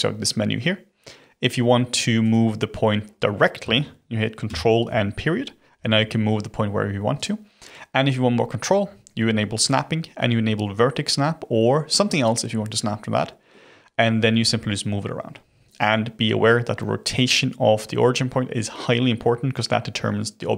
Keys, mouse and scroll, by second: 4.4 ctrl+., 5.7 g, 9.6-12.6 drag, 13.5-14.3 middle drag, 14.3 g.